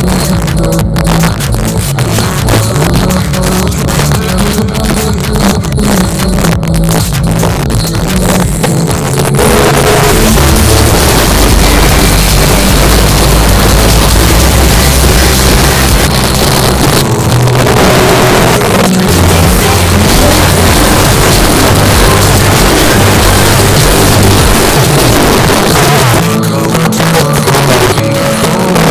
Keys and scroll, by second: 16.1 Page_Down, 25.1 Page_Down.